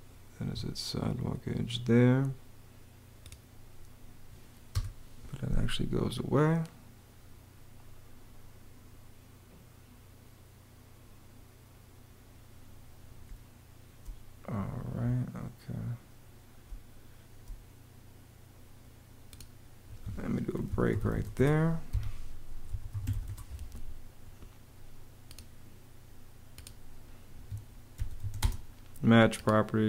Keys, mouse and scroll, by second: 0.2 Escape, 4.5 BackSpace, 13.0 space, 16.5 space, 19.6 Escape, 20.2-23.4 typing, 21.7 Escape, 27.1 Escape, 27.5-28.5 typing.